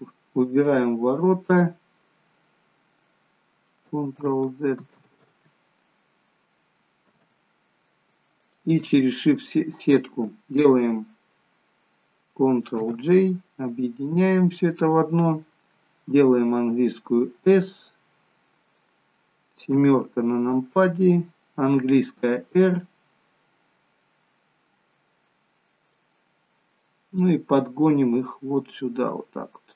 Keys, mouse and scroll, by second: 0.6 click, 2.0-2.4 scroll up 2, 4.2 ctrl+z, 5.0 ctrl+z, 7.1 Tab, 8.4 shift+click, 12.9 ctrl+j, 14.4-14.8 scroll down 2, 14.8 middle click, 16.2 s, 19.8 KP_7, 22.2 r, 26.8 click.